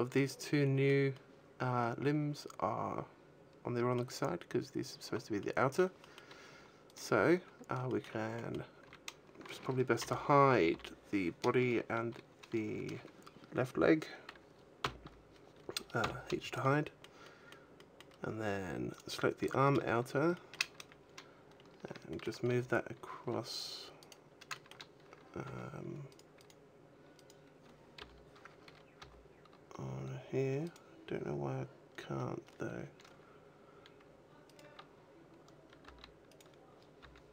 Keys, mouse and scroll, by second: 0.3 middle click, 1.0 middle click, 5.2 middle click, 5.9 middle click, 6.7 right click, 7.4 scroll up 1, 7.7 shift+middle click, 8.1 middle click, 8.5 a, 9.8 l, 10.6 l, 14.7 f, 15.9 h, 16.5 middle click, 17.1 middle click, 17.6 middle click, 18.8 right click, 19.4 shift+middle click, 20.2 shift+middle click, 20.6 a, 21.4 scroll up 1, 21.9 shift+middle click, 22.3 g, 23.9 right click, 24.4 shift+middle click, 25.3 g, 26.0 right click, 26.2 right click, 27.3 right click, 27.8 l, 28.8 g, 30.3 right click, 34.3 right click, 35.6 g, 36.2 right click, 36.8 g.